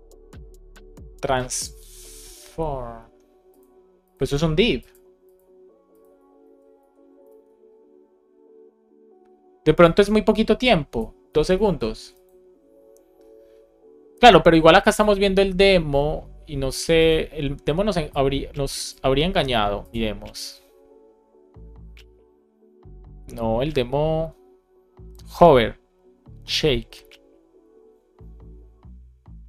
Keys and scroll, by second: 6.3 super+z, 7.2 super+s, 11.6 super+s.